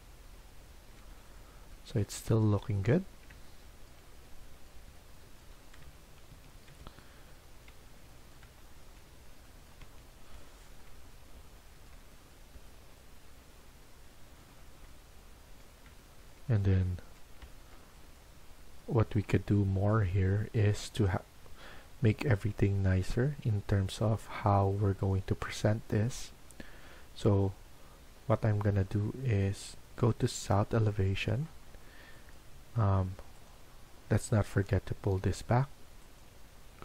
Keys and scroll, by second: 6.1 Escape, 6.2 Escape, 9.8 Escape.